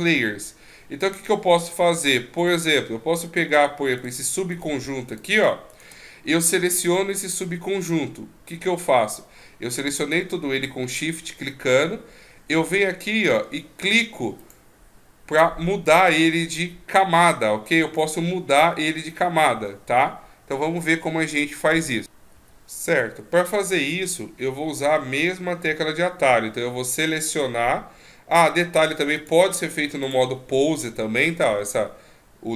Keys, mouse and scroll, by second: 2.5 right click, 4.0 shift+right click, 4.5 shift+right click, 5.1 shift+right click, 5.7 shift+right click, 14.4 click, 15.8 click, 17.8 right click, 22.3 click, 29.2 click.